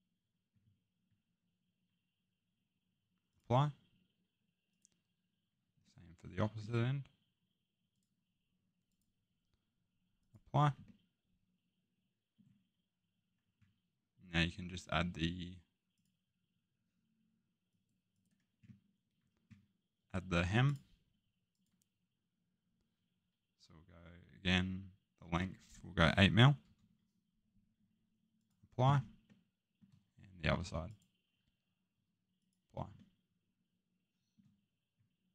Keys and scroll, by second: 26.6 8.